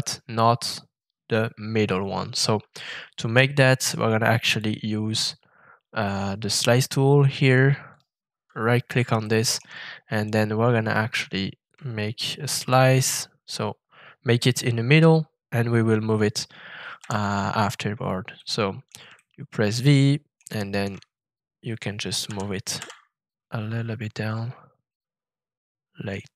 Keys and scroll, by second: 16.9 v, 22.2 shift+g, 22.7 z.